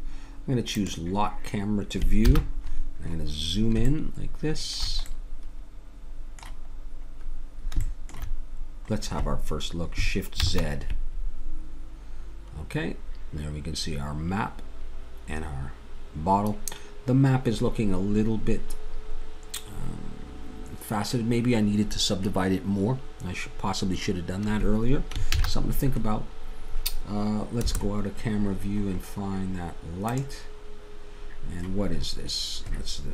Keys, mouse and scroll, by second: 0.9-2.2 drag, 2.2 n, 10.4 shift+z, 25.4 shift+z, 27.7 KP_0, 28.7-33.1 drag.